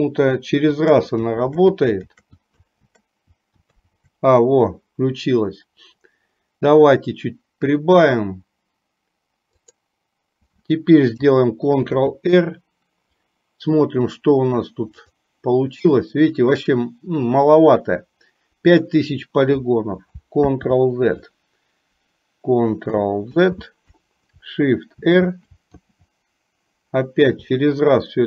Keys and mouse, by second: 0.9-3.6 typing, 12.1 ctrl+r, 20.5 ctrl+z, 23.1 ctrl+click, 23.5 ctrl+z, 25.0 shift+r, 25.9 shift+r.